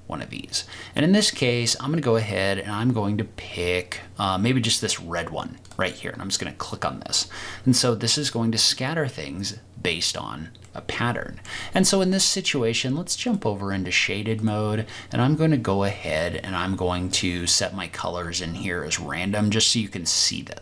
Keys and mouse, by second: 10.6 middle click, 13.3-17.6 drag.